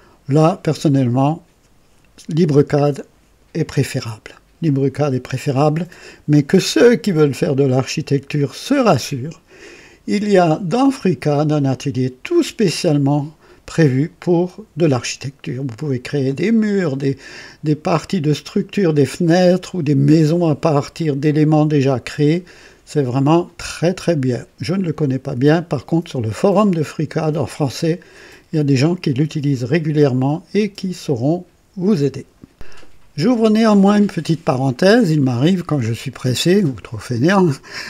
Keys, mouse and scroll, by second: 8.6 click.